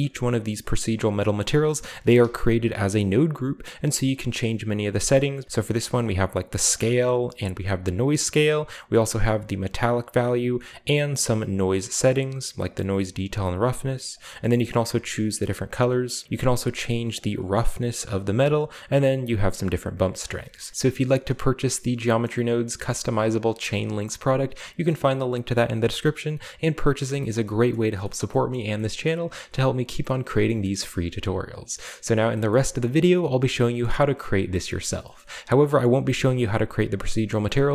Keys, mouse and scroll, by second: 0.3 right click, 0.8 right drag, 1.2 right drag, 2.4 g, 2.7 right click, 3.6 right drag, 4.0 right drag, 5.4 right click, 5.5 scroll up 1, 5.6-6.8 drag, 6.6 right click, 7.2 click, 7.9 right click, 8.4-10.2 drag, 10.6-12.0 drag, 12.6 click, 14.6-15.7 drag, 15.7 middle click, 16.2-18.0 shift+drag, 18.0 shift+middle click, 18.2-20.3 middle drag, 20.3-20.7 scroll down 3, 20.6 middle click, 22.2 middle click, 28.8 middle click, 30.5-31.4 shift+middle drag, 32.5 middle click, 33.8 middle click, 34.8 middle click, 35.9 middle click, 36.0 right click, 36.3 right click, 36.7 right click, 37.0-37.4 right drag.